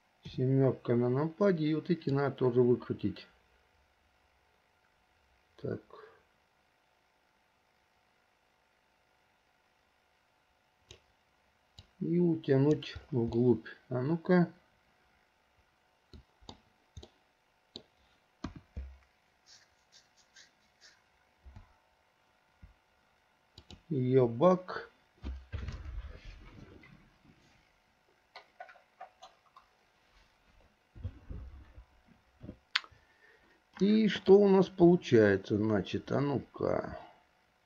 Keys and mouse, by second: 0.4 KP_7, 2.2-11.2 drag, 12.0-13.0 drag, 13.7 click, 13.9 middle click, 14.3 click, 14.3 right click, 14.6-15.6 middle drag, 15.6 click, 15.6 right click, 16.1 middle click, 17.4 middle click, 18.6 KP_1.